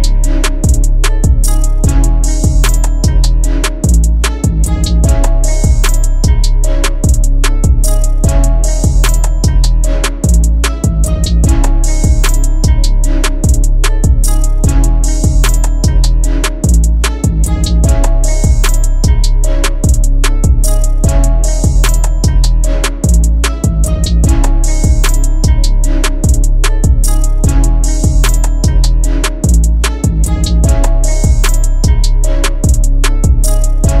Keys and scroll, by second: 0.1 Escape, 2.1 F3, 6.6 p, 9.5 F4, 13.1 shift+F4, 29.0 shift+F2.